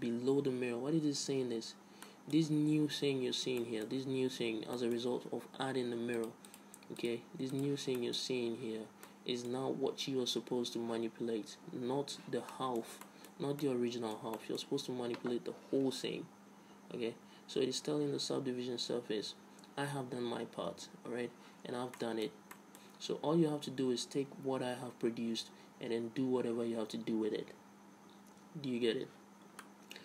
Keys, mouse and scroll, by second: 2.1 middle click, 2.3-6.5 middle drag, 6.5-9.6 drag, 8.3-9.5 middle drag, 9.5 right click, 9.6-11.3 middle drag, 12.8 middle click, 13.1 Tab, 13.7 Tab, 14.5 Tab, 15.0 Tab, 22.3-25.2 middle drag, 29.9-30.0 middle drag.